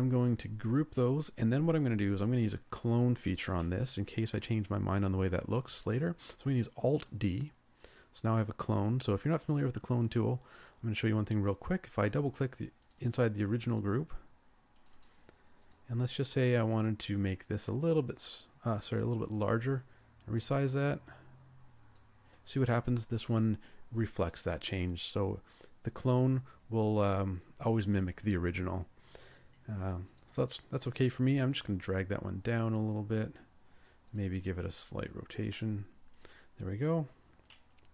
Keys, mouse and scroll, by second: 0.7 ctrl+g, 3.7 middle click, 7.0 alt+d, 11.1 scroll up 1, 12.1 double click, 36.9 scroll down 1, 37.5 middle click.